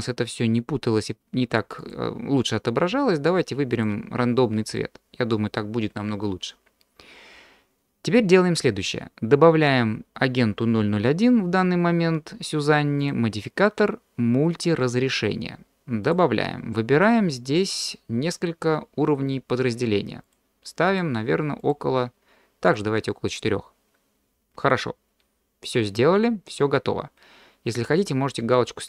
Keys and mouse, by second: 1.9-4.4 drag, 4.7-5.3 middle drag, 13.0-16.2 drag, 20.9 click, 21.2 middle click, 21.6 middle click, 22.6 middle click.